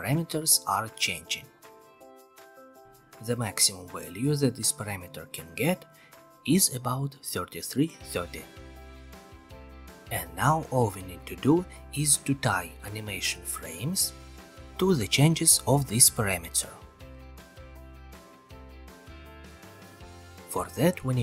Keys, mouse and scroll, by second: 0.4-1.6 scroll down 15, 7.5 click, 10.0-11.0 scroll, 11.0 middle click, 18.6-19.6 drag, 19.9-21.0 drag.